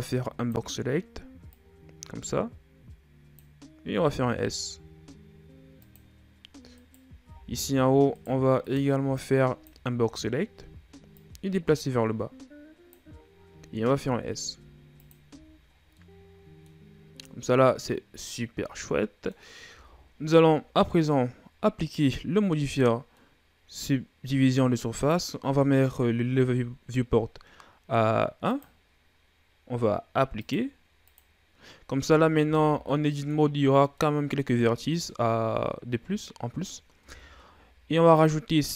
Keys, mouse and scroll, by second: 1.3-3.7 drag, 3.7 s, 6.6 right click, 7.1 b, 8.4 right click, 8.8 b, 10.2-10.9 shift+scroll up 1, 10.9-13.1 drag, 13.1-13.8 scroll up 1, 13.8 s, 15.1 z, 15.5 scroll down 4, 15.8 middle click, 16.7-17.1 scroll up 1, 17.1-19.5 middle drag, 19.5 Tab, 20.1-24.8 middle drag, 24.8-27.8 drag, 28.3-31.9 drag, 31.9 Tab, 32.5 scroll down 1, 32.7 middle click, 33.3-33.8 scroll up 1, 33.8-36.8 middle drag, 36.8 Tab, 38.0-38.7 drag.